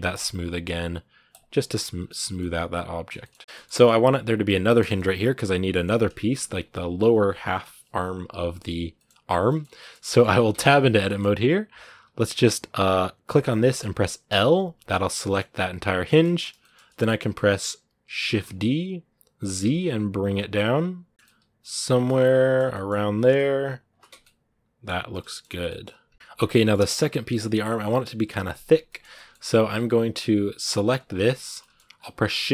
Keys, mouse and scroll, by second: 0.0 w, 1.7 scroll down 2, 1.9 middle click, 2.0 a, 2.2-9.1 middle drag, 9.1-9.6 scroll up 2, 9.3 shift+middle click, 9.6 shift+middle click, 10.0-11.8 scroll up 6, 10.3 Tab, 10.8 shift+middle click, 11.8 z, 13.3 right click, 14.1 l, 14.7 middle click, 15.4 z, 15.6 scroll down 2, 15.9 shift+middle click, 16.1 scroll down 1, 16.4-18.1 shift+middle drag, 18.1 shift+d, 21.1 shift+middle click, 21.6 scroll up 1, 21.8-22.8 middle drag, 22.8 g, 24.0 middle click, 24.7 scroll down 1, 25.1 shift+middle click, 25.4 scroll down 1, 25.5 middle click, 26.1 scroll down 1, 26.3 middle click, 26.7-28.7 scroll up 2, 28.7-30.8 shift+middle drag, 30.8 right click, 31.4 shift+middle click, 31.7-32.5 scroll down 1.